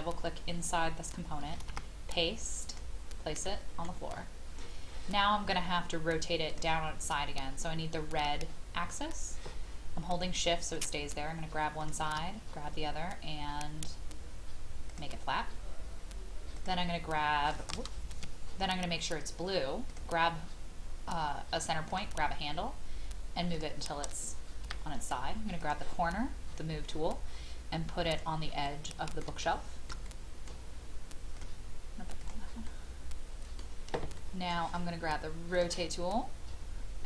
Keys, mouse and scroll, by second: 1.6 ctrl+v, 2.7 click, 3.4 middle click, 3.5-3.8 scroll up 1, 4.1-6.5 scroll up 1, 6.5 click, 10.7 shift+click, 11.8 shift+click, 14.9 click, 18.1 Escape, 19.9 click, 24.6 m, 25.6 click, 26.4-26.9 scroll up 1, 28.1 click, 29.4-31.2 shift+middle drag, 31.3 click, 32.7-35.3 middle drag, 35.5 click.